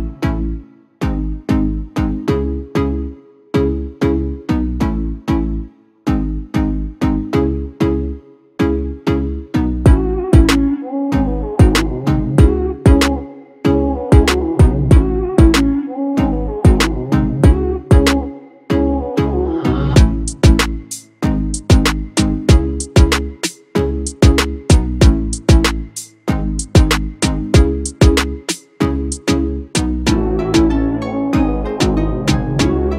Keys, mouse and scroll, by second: 4.5 shift+click.